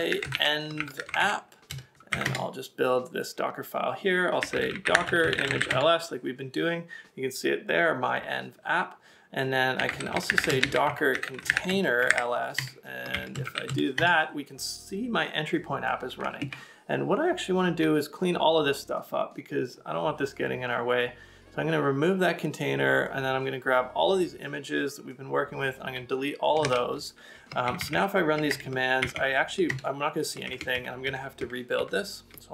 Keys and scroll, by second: 13.0-13.7 typing, 17.3 super+Tab, 26.6 super+Tab, 27.7 Up, 27.8 Up, 27.9 Up, 28.5 Return, 29.1 Up, 29.2 Up, 29.7 Return, 30.5 Up, 30.7 Up, 30.9 Up, 31.4 Up, 31.8 Up.